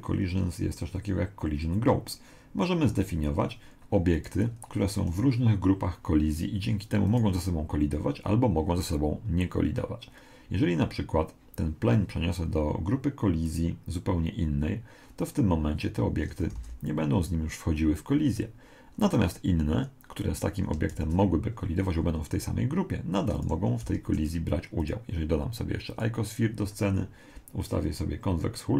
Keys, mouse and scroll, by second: 4.1 right click, 7.1 right click, 13.5 click, 16.5 alt+a, 18.2 Escape, 20.9 shift+a, 23.9 g, 25.9 click.